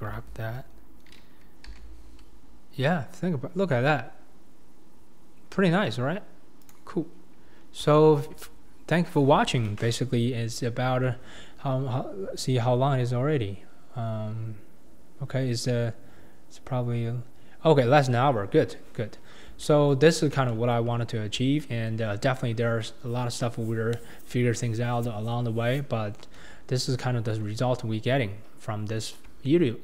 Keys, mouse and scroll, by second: 0.1 g, 7.1-7.5 scroll up 4, 7.5-7.9 scroll down 4, 7.9-8.5 shift+middle drag, 8.5-12.7 scroll up 2, 18.7-19.1 scroll up 3, 19.1-19.6 scroll down 4, 19.6-20.1 shift+middle drag, 20.1-20.5 scroll down 2, 20.5-20.9 shift+middle drag, 20.9-21.6 scroll up 3, 21.6-22.3 shift+middle drag, 22.3-22.8 scroll down 2, 26.6-27.0 scroll up 3, 27.0-27.5 shift+middle drag, 27.5-27.9 scroll down 2, 28.3-29.0 scroll up 1, 29.0-29.4 scroll down 2, 29.4-29.8 shift+middle drag.